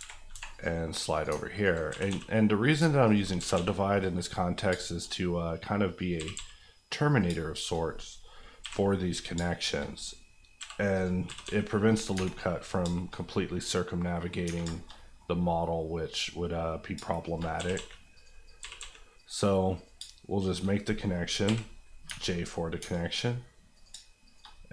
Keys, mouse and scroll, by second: 0.3 ctrl+r, 0.5 click, 1.2 alt+click, 1.8 click, 1.9 g, 2.0 g, 2.6 click, 2.8 alt+click, 3.3 click, 3.3 g, 3.5 g, 3.9 click, 4.3-5.4 scroll up 4, 4.7 shift+middle click, 6.0 click, 6.2 g, 6.3 g, 7.1 click, 7.2 shift+click, 7.8 click, 8.6 j, 9.1 click, 9.3 shift+click, 9.9 click, 10.6 j, 10.9 click, 11.2 g, 11.4 g, 11.9 click, 12.1 Tab, 12.3-12.6 scroll down 1, 12.8-13.2 shift+scroll down 2, 13.1 middle click, 13.5 middle click, 14.3 scroll up 1, 14.4 Tab, 14.7 shift+middle click, 14.9 middle click, 15.2-16.1 scroll up 1, 16.1 click, 16.9 shift+click, 17.5 click, 17.7 g, 18.1 click, 18.6 g, 18.8 g, 19.1 click, 19.9 shift+click, 20.7 click, 21.4 j, 21.7 scroll down 1, 22.0 Tab, 22.5 scroll down 1, 22.8 Tab, 22.9 middle click, 23.7 click, 23.9 shift+click, 24.5 click.